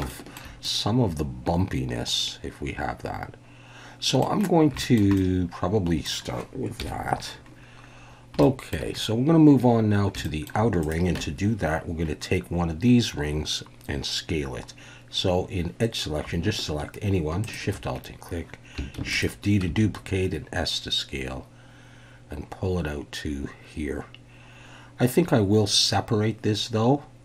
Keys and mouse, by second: 0.1 shift+middle drag, 0.6-4.2 middle drag, 4.8 shift+middle click, 5.1-6.0 middle drag, 6.8 KP_1, 8.4-8.7 shift+middle drag, 10.2 shift+middle drag, 10.8 click, 11.2 Tab, 17.4 alt+shift+click, 19.0 shift+d, 19.1 click, 19.7 s.